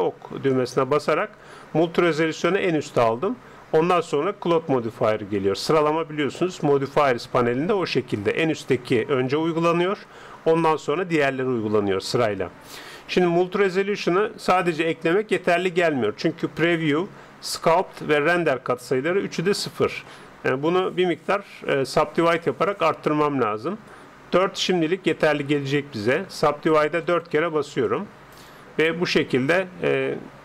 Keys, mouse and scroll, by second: 0.5-2.3 drag, 26.3-30.1 drag.